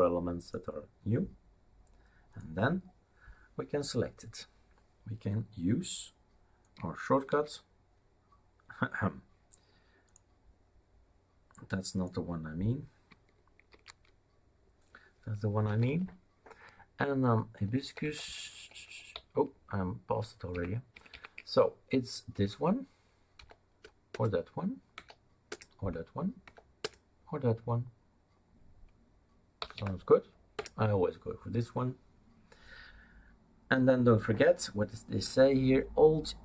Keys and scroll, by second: 7.3 super+t, 13.7 super+r, 15.7 Down, 15.8 Down, 16.0-18.0 Down, 19.1 Up, 19.6 Up, 19.7-20.0 Up, 20.9 Up, 22.3 Return, 23.4 Down, 24.1 Return, 24.9 Down, 25.5 Return, 26.4 Down, 26.8 Return, 29.6 Up, 29.7 Up, 30.5 Return.